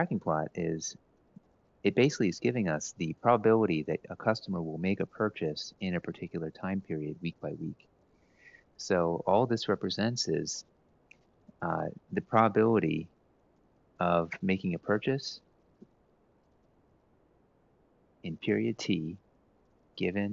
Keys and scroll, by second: 8.9-9.4 typing, 16.1-19.4 typing.